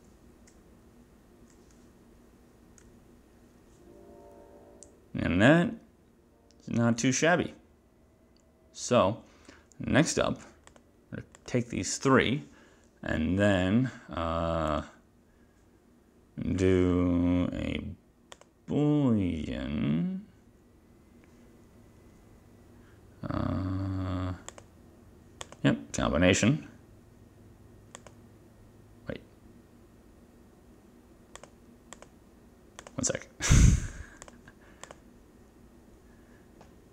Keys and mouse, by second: 14.8 click, 18.5 click, 24.6 click, 25.6 click, 28.1 click, 31.5 click, 32.1 click, 32.9 click, 34.3 click, 35.0 ctrl+click.